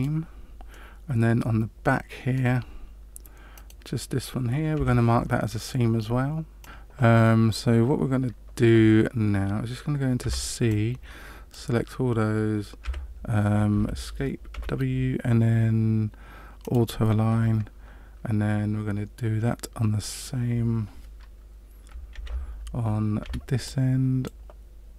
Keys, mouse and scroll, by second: 0.7 middle click, 3.5 right click, 4.7 w, 10.2 c, 14.5 w, 22.1 alt+a, 23.2 c.